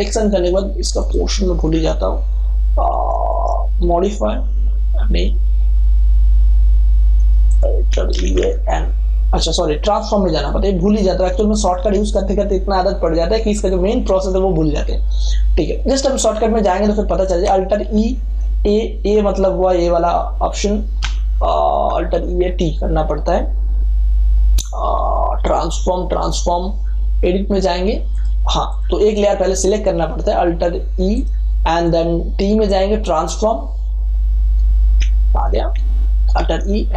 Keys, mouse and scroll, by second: 1.0 click, 7.4 click, 8.1 alt+e, 8.4 a, 15.1 click, 17.8 alt+e, 20.0-21.8 typing, 28.1 click, 36.4 alt+e.